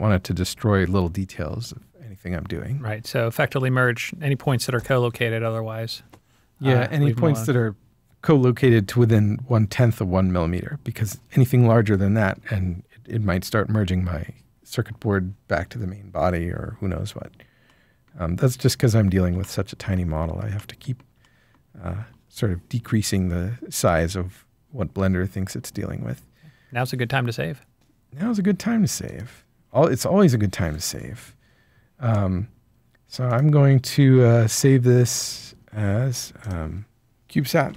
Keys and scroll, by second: 37.2-37.6 typing.